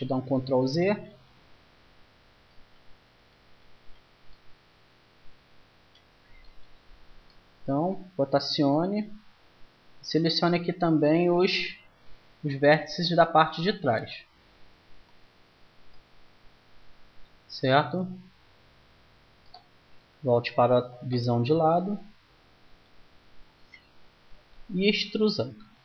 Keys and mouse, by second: 7.1-9.1 middle drag, 12.9-14.0 right drag, 14.0-17.6 middle drag, 19.8 KP_1, 25.5 e.